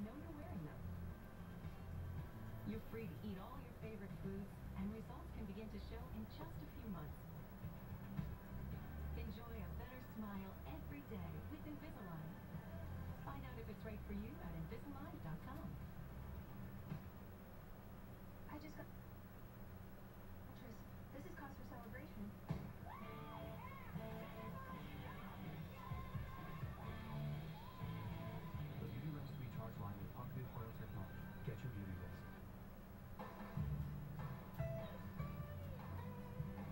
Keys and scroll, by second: 21.5 Delete.